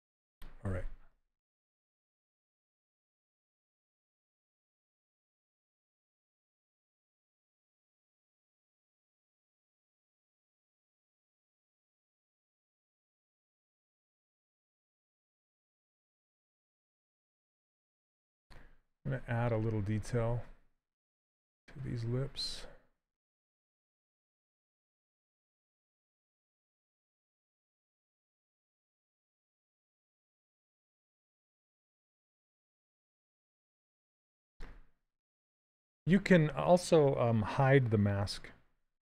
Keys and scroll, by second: 2.8 s, 9.5 s, 15.6 shift+f, 19.2 s, 26.0 shift+f, 38.9 ctrl+h.